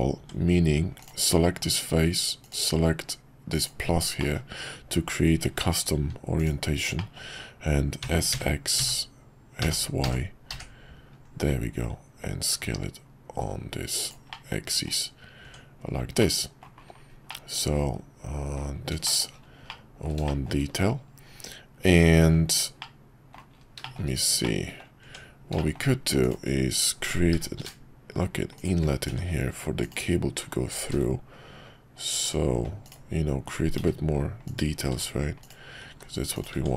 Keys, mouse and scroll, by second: 0.2 Tab, 3.3-4.0 drag, 4.3 middle click, 5.4 Tab, 7.0 middle click, 8.0 s, 14.3 middle click, 15.4 Tab, 16.2-16.6 middle drag, 17.2-18.6 middle drag, 19.0 shift+middle drag, 19.6-20.1 middle drag, 20.2 shift+middle click, 22.8-23.3 middle drag, 23.8 shift+middle click, 24.4-24.8 middle drag, 25.0 Tab, 25.6 shift+middle click, 27.3 i, 30.7 ctrl+b, 32.8 click, 33.7 i, 36.5 Tab.